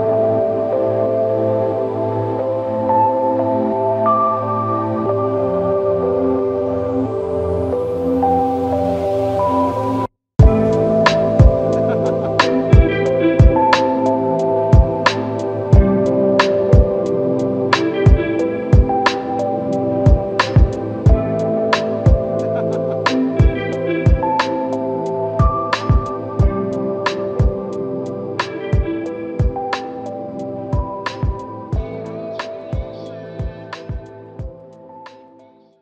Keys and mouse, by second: 2.1 double click, 8.0 shift+click, 11.1 shift+click, 14.0 ctrl+alt+click, 17.0 alt+click, 18.7 ctrl+z, 23.4 ctrl+click, 24.6 ctrl+alt+click, 27.8 ctrl+click, 29.7 alt+click, 31.9 ctrl+alt+click, 32.9 alt+shift+click.